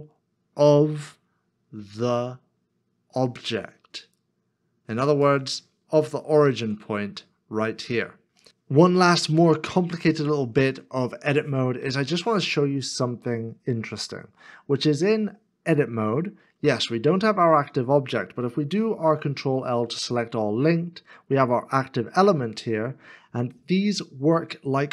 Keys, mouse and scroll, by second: 6.4 ctrl+z, 14.0 Tab, 19.1 ctrl+l.